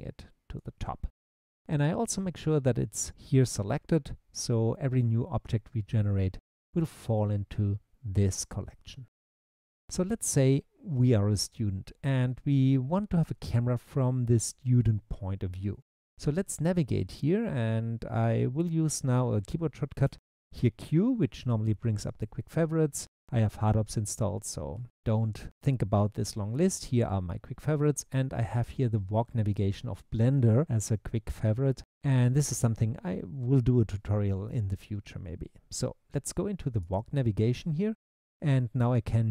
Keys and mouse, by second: 20.1 q, 38.4-39.3 typing.